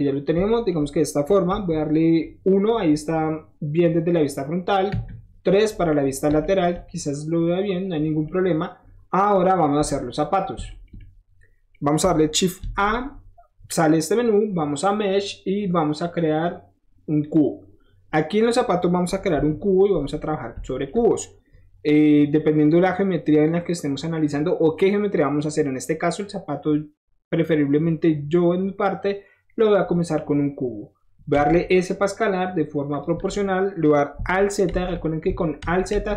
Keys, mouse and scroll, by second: 0.3-5.0 shift+middle drag, 1.4 KP_1, 5.0 KP_3, 6.1-7.7 shift+middle drag, 7.9 shift+middle click, 9.9 Tab, 10.2 click, 10.6 shift+middle drag, 10.9-11.7 shift+middle drag, 12.5 shift+a, 14.8 click, 17.2 click, 17.7 scroll down 1, 18.1-18.4 middle drag, 19.4 KP_1, 20.6 shift+middle drag, 29.9 scroll down 1, 32.9 click, 33.3 middle click, 34.6 alt+z, 35.5 alt+z.